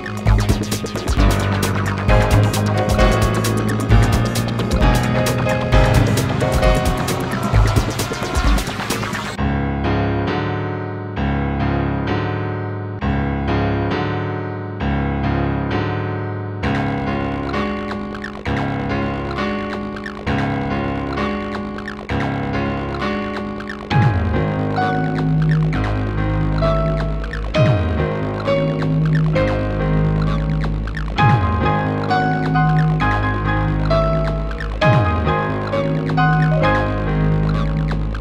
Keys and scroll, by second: 14.1 ctrl+z.